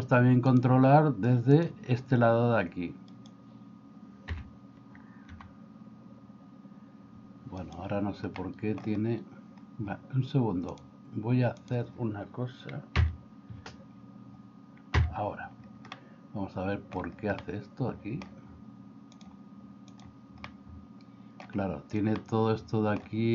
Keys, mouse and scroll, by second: 0.6-1.7 drag, 4.4 l, 5.4 r, 8.4 middle click, 10.8 click, 13.0 KP_Divide, 15.0 KP_Divide, 15.9-17.0 middle drag, 17.4-18.3 middle drag, 19.2 click, 20.6 middle click, 22.2 middle click.